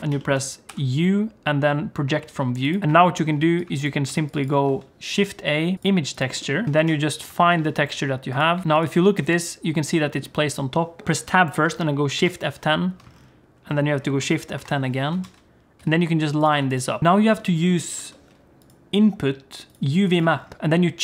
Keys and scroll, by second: 0.7 u, 2.8 Tab, 4.1 g, 4.6 shift+a, 11.0 shift+F5, 11.0 Tab, 12.2 shift+F10, 14.6 shift+F10, 15.2 a, 15.8 s, 16.5 g, 17.0 shift+F3, 17.9 shift+a.